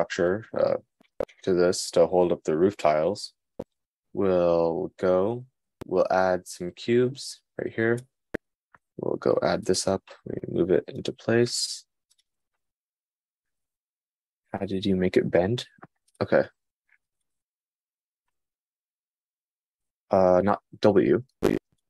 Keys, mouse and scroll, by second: 5.8 shift+a, 9.2 g, 16.7-17.9 drag, 20.7 Tab, 20.7-21.7 drag.